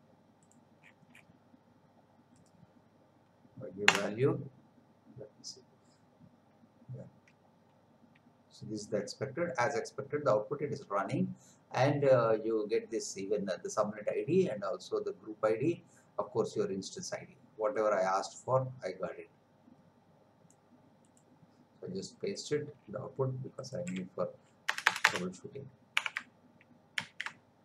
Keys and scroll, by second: 3.9 Return, 23.8 Delete, 24.7 Return, 26.0 Up, 27.0 ctrl+v.